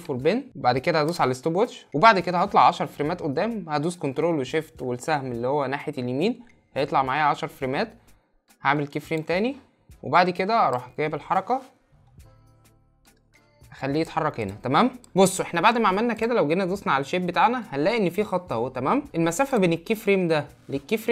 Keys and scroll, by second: 4.2 ctrl+shift+Right.